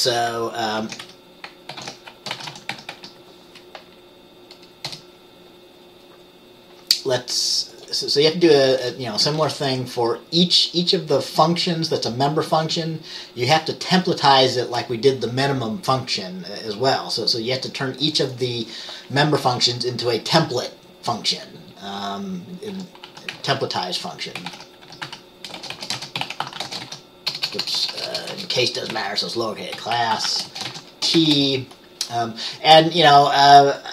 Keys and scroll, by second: 0.9 ctrl+x, 1.2 o, 1.8 ctrl+x, 1.9 ctrl+f, 2.4-2.8 typing, 3.0 Tab, 5.0 Return, 19.7 Return, 22.8 Return, 22.9-31.3 typing.